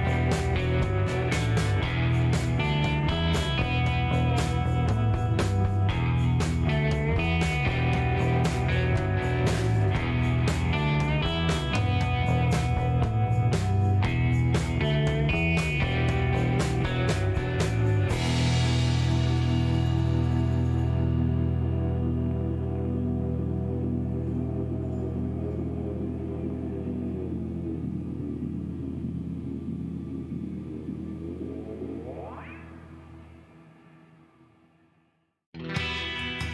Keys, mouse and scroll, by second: 1.9 scroll up 2, 2.5 scroll down 2, 3.1-3.6 scroll up 4, 4.4 scroll up 2, 8.2 click, 10.4 ,, 10.6 KP_8, 13.6 click, 14.8-15.6 scroll down 3, 15.2 middle click, 15.9 shift+right click, 17.1 shift+scroll down 1, 17.3 shift+middle click, 17.6 shift+right click, 18.6 shift+scroll down 2, 18.9 middle click, 19.3 shift+right click, 20.6 shift+right click, 21.5 shift+middle click, 23.3 shift+right click, 24.3 shift+middle click, 26.2 middle click, 26.9 middle click, 28.1 middle click, 29.6 shift+right click, 30.8 shift+scroll up 1, 31.3 middle click, 32.1 shift+middle click, 33.2 shift+right click, 36.4 shift+right click.